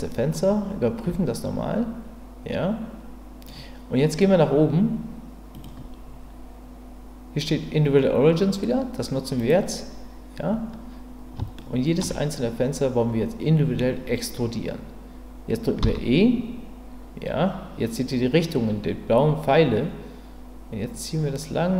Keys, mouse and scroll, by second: 0.3-3.5 middle drag, 5.6-9.5 drag, 11.6 shift+middle click, 15.8 e.